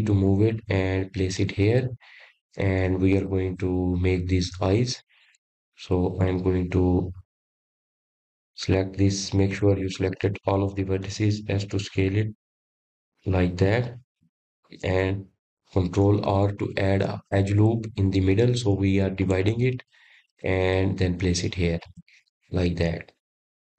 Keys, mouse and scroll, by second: 3.2 g, 5.6-6.1 scroll up 5, 9.9 click, 13.1 a, 14.6 s, 17.7-19.9 scroll up 1, 19.9 ctrl+r.